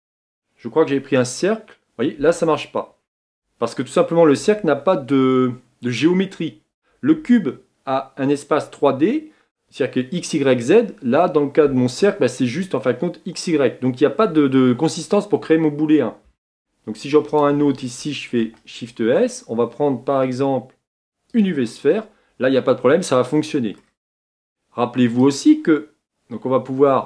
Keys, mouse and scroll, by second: 1.3 shift+s, 22.5-23.9 middle drag, 23.9 scroll up 1, 25.5-27.0 drag.